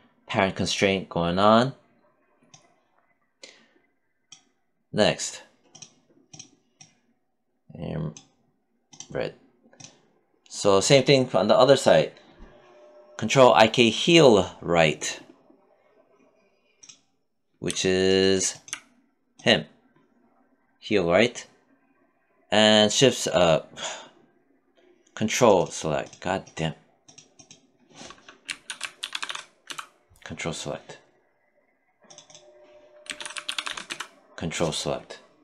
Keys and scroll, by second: 27.7 c, 28.5 o, 28.9 l, 32.3 c.